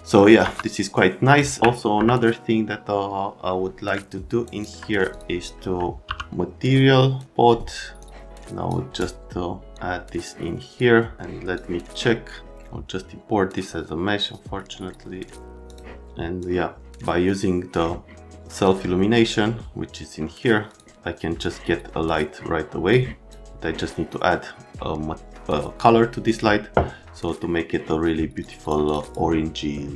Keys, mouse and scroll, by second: 0.4 F3, 1.3 middle click, 1.6 alt+w, 1.9 F3, 4.6 alt+middle click, 5.1 click, 5.8 alt+middle click, 6.1 n, 7.2 scroll up 1, 8.0 click, 9.7 click, 10.2 click, 14.9 right click, 15.7 click, 16.4 click, 20.7 click, 21.4 click, 26.3 click, 27.4 right click, 28.4 click, 28.9 click, 29.0 click.